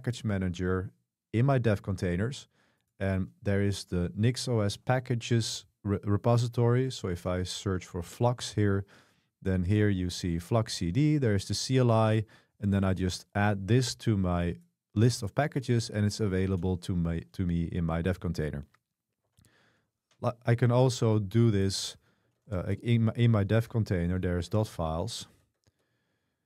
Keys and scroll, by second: 7.0-8.4 typing, 19.3 super+3, 20.5-25.3 typing, 24.7 Tab.